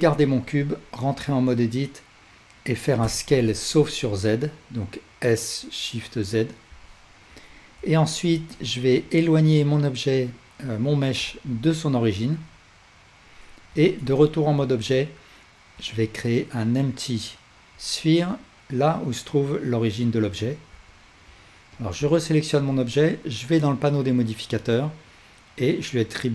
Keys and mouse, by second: 0.2 Tab, 3.1 s, 6.9-21.9 alt+drag, 13.7 Tab, 15.8 shift+a, 22.1-26.3 alt+drag.